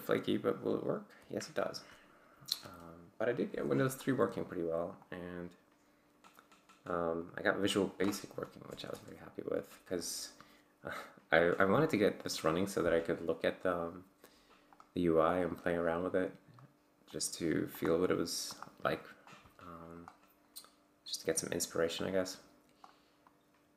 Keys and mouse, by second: 2.6 F11, 4.0 click, 5.0 click, 6.3 click, 7.2 click, 8.9 Return, 14.7 click, 15.5-16.7 drag, 17.1 click, 17.8 click, 18.5 click, 19.3 click, 20.0 click, 22.0 click, 23.3 click.